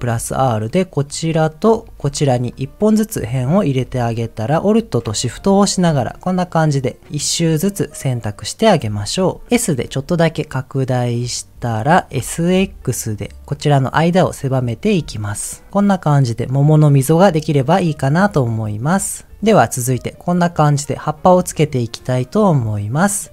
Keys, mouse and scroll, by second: 1.2 right click, 1.8 ctrl+r, 2.4 right click, 4.0 middle click, 5.6 alt+shift+click, 6.1 middle click, 7.6-9.0 middle drag, 10.0 s, 11.6 click, 12.1 s, 12.5 x, 15.7 middle click, 17.2-18.2 middle drag, 18.6-19.4 scroll down 2, 22.6 click, 23.0 middle click.